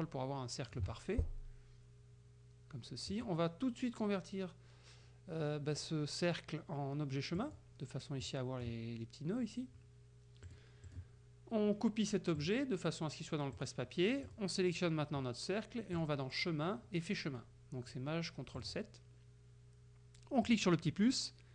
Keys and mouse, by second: 3.2 click, 7.4 click, 8.2 click, 10.5 click, 10.9 click, 12.4 click, 13.6 click, 14.3 click, 16.0 click, 18.6 click, 20.5 click.